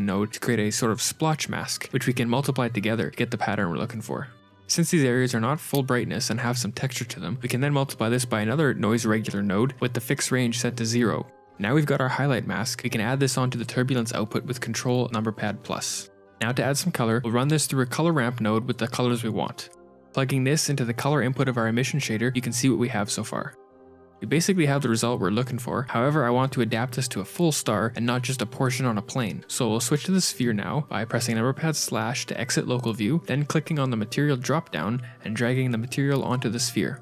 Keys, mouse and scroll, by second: 0.3 click, 0.9 click, 1.0 ctrl+shift+click, 1.6 scroll down 2, 1.8 shift+click, 6.7 middle click, 7.2 middle click, 7.4 middle click, 7.4 click, 7.4 shift+a, 7.6 shift+d, 8.9 shift+click, 9.3 click, 10.9 scroll down 8, 11.0 middle click, 11.0 click, 11.1 shift+f, 11.7 F2, 13.0 shift+click, 13.0 x, 15.0 click, 15.5 ctrl+shift+click, 16.2-17.1 scroll up 6, 17.1 g, 17.1 shift+a, 17.9 ctrl+v, 18.2 click, 21.7 ctrl+shift+click, 23.2 middle click, 24.0-24.7 scroll down 3, 24.9 scroll down 2, 25.9 middle click, 26.5 scroll down 1, 27.1-28.9 scroll up 4, 30.8 z, 31.8 KP_Divide, 32.5 click, 32.7 click, 35.8 click.